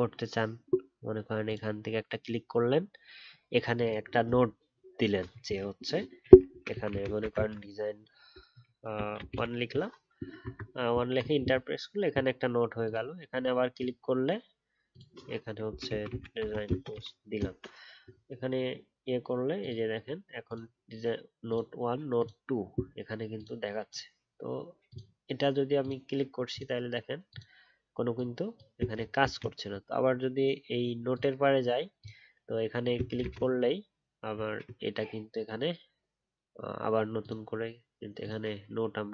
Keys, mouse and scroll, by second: 33.2 ctrl+z.